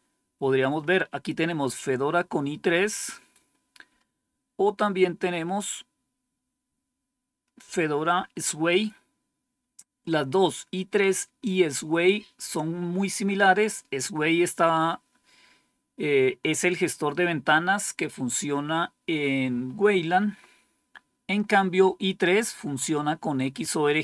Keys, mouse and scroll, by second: 2.4-3.4 scroll down 4, 4.1-4.4 scroll down 1, 4.8-8.1 scroll down 7, 21.2-22.3 scroll up 5, 23.8 scroll up 2.